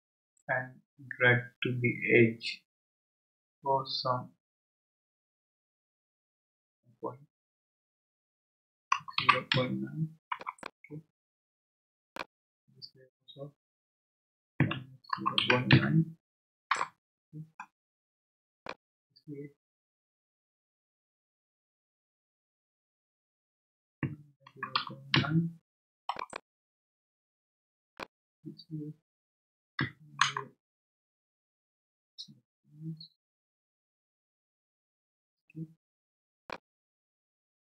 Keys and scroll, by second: 8.7-10.0 typing, 10.3 Return, 14.6-16.2 typing, 16.7 Return, 23.8-25.6 typing, 26.1 Return, 29.8 -, 30.2 0, 35.1 Escape.